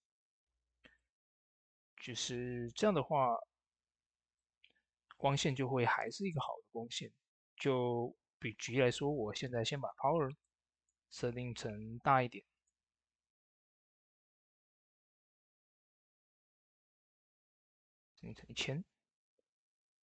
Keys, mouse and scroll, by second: 0.5 m, 0.8 click, 0.8 click, 1.1 space, 4.4 ctrl+r, 4.9 ctrl+t, 5.3 click, 6.3 ctrl+d, 7.2 click, 15.2 shift+space, 19.8 shift+space, 19.9-20.0 drag.